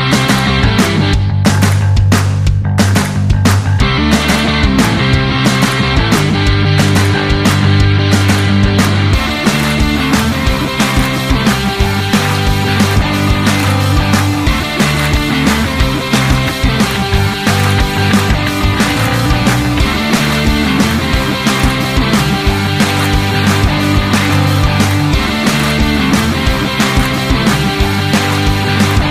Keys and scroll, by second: 26.4 Delete.